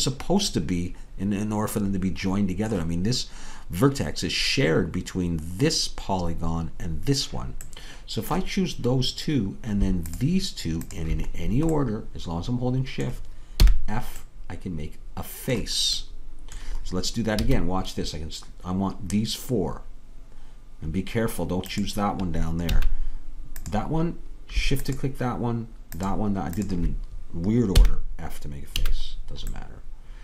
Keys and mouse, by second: 2.4 middle click, 7.7-9.6 middle drag, 13.7 f, 14.9-20.2 middle drag, 17.4 a, 22.8-30.2 drag, 22.8 a, 27.8 f.